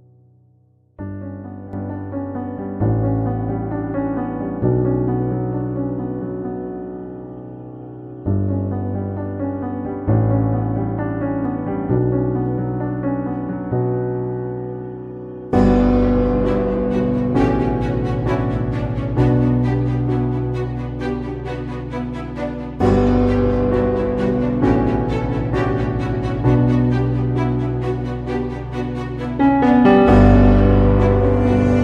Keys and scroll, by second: 2.2 [, 3.2 ], 3.3 [, 4.9 space, 11.1 ctrl+i, 11.2-12.6 typing, 15.3 [, 17.2 space, 17.7 ], 18.5 space, 25.3 x, 27.5 x, 28.1 space, 31.5 x.